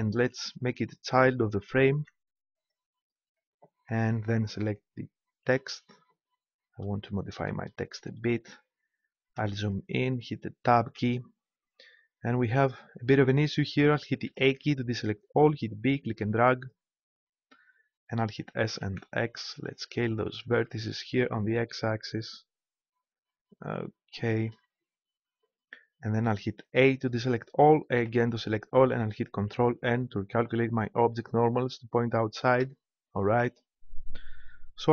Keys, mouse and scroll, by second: 1.9 ctrl+p, 5.5-7.2 right drag, 10.9 Tab, 14.2 a, 15.6 b, 18.4 s, 24.5-26.8 drag, 26.8 a, 27.9 a, 29.5 ctrl+n, 32.6 Tab, 33.3 click.